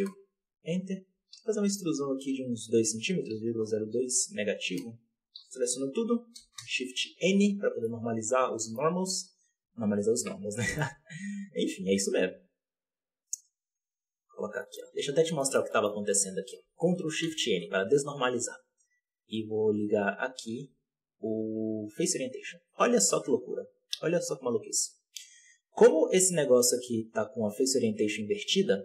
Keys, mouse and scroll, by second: 1.0 e, 5.3 a, 6.3 shift+n, 6.5 shift+n, 7.7-8.8 middle drag, 8.8-9.6 scroll up 1, 9.6 KP_7, 9.7 z, 10.4 scroll down 1, 10.5 shift+middle click, 10.8-11.7 scroll up 1, 11.7 alt+a, 12.2 click, 13.2-14.5 drag, 14.5 middle click, 14.9 z, 15.0 click, 15.3 middle click, 15.8 scroll up 3, 17.1 ctrl+shift+n, 19.9 ctrl+shift+n, 20.4 Tab, 21.9-28.8 drag.